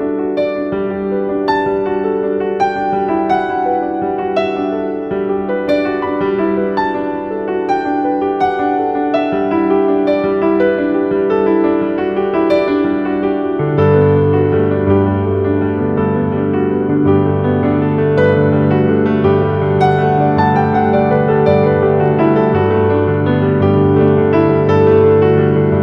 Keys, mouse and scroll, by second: 3.8-7.1 drag, 7.1-9.7 drag, 9.7-12.3 drag, 12.3 click, 14.0 scroll down 1, 14.1 z, 14.2 click, 21.0-22.0 typing, 21.2 click, 22.7 right click, 24.0 click.